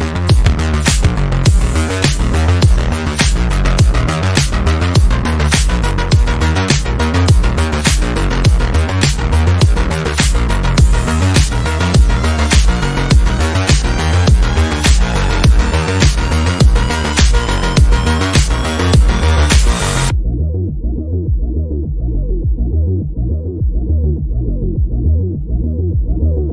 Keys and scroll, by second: 0.2 Delete, 7.4 ctrl+g, 9.3 Delete, 10.5 F3, 10.7 Escape.